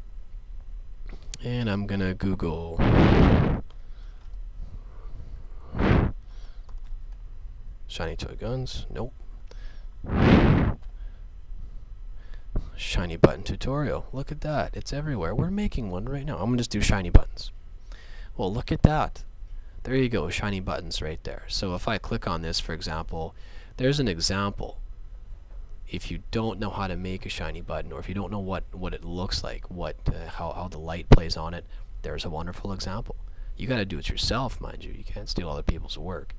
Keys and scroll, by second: 3.0-4.0 typing, 5.2 BackSpace, 6.2 t, 6.7 h, 10.8 n, 14.1 Down.